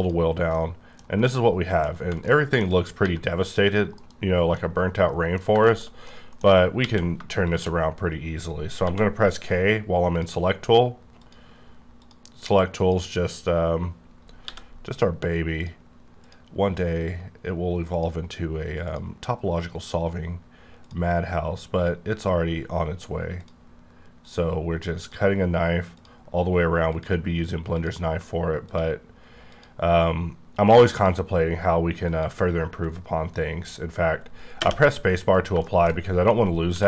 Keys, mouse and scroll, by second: 0.0 click, 0.4 middle click, 0.9 scroll down 3, 1.2 middle click, 2.2 middle click, 2.6 scroll up 2, 3.0 1, 3.6 click, 4.0 KP_Decimal, 4.5 middle click, 5.4 scroll down 2, 5.6 shift+scroll up 1, 5.6 shift+middle click, 5.8 shift+scroll down 2, 6.0 scroll up 1, 6.1 middle click, 6.7 q, 7.4 shift+click, 9.8 k, 10.1 click, 11.2 click, 12.0 click, 12.8 click, 14.4 c, 15.6 click, 16.2 click, 17.9 click, 18.8 click, 19.8 click, 20.8 click, 22.1 click, 23.4 click, 24.2 click, 25.0 click, 26.0 click, 26.9 click, 27.7 click, 28.7 click, 29.5 click, 30.9 click, 32.1 click, 35.2 scroll up 2, 35.9 shift+middle click, 35.9 shift+scroll up 2, 36.7 q.